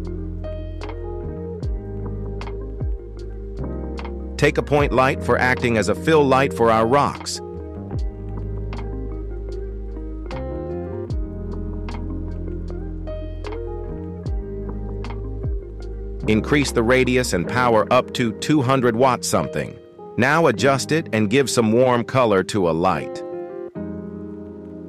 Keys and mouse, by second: 1.1 Return, 1.6 Delete, 2.1 click, 2.6 shift+a, 5.2 g, 7.2-9.5 shift+drag, 10.2-10.6 middle drag, 12.3-13.6 drag, 13.3 KP_0, 14.7-16.3 drag, 17.8 g, 20.0-20.8 middle drag, 21.7 g, 23.3 z, 23.4 z, 23.5 z, 24.3 shift+middle click.